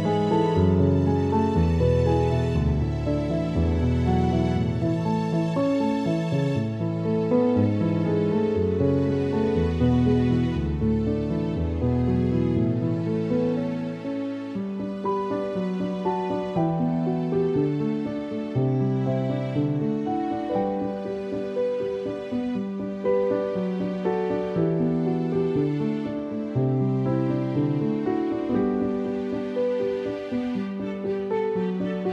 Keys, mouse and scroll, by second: 1.0 click, 2.7 click, 5.4 click, 7.1 click, 9.2 right click, 9.8 click, 11.4 click, 14.4 click, 17.2-21.7 typing, 23.9 ctrl+click, 24.1 ctrl+e, 26.6 click, 30.1 right click, 30.9 click.